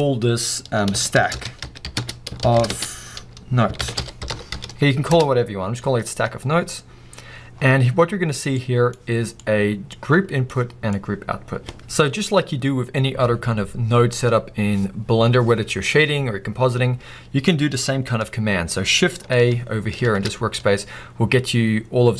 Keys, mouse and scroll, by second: 5.2 Return.